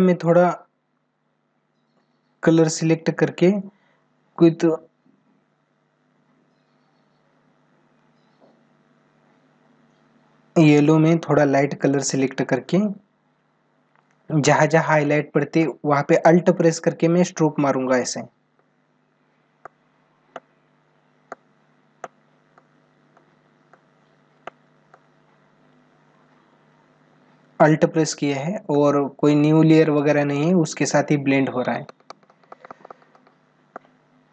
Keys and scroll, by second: 30.0 space, 32.9 ctrl+alt+z.